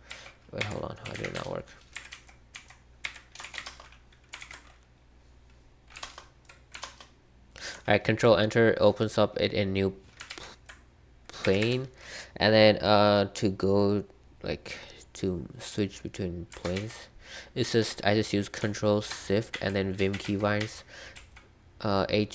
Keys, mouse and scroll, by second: 0.0-4.0 typing, 0.6 Escape, 1.9 Escape, 3.0 Escape, 4.3 ctrl+o, 5.7-6.5 typing, 6.8 ctrl+Return, 10.2 ctrl+h, 11.4 Escape, 11.6 Escape, 16.7 ctrl+h, 19.5 ctrl+l, 19.9 ctrl+h, 20.1 ctrl+l, 20.2 ctrl+h, 21.1 ctrl+l.